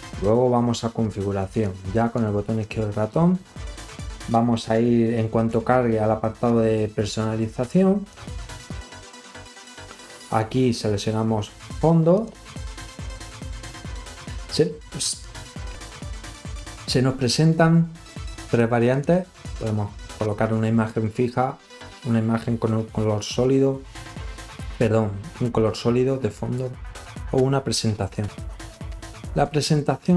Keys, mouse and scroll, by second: 1.7 click, 8.1 click, 12.2 click, 18.2 click.